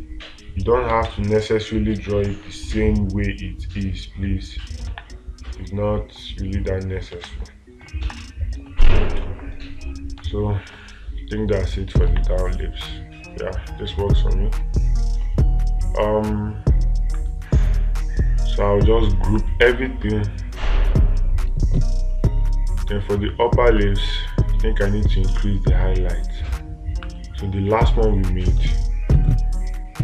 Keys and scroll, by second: 5.4 space, 7.6 space, 10.7 space.